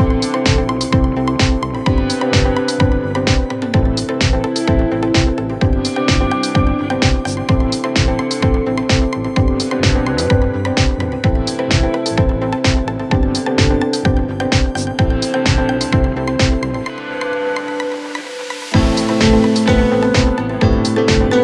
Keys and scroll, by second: 6.5 Delete, 9.1 Escape, 10.0 Delete, 15.0 shift+Page_Up.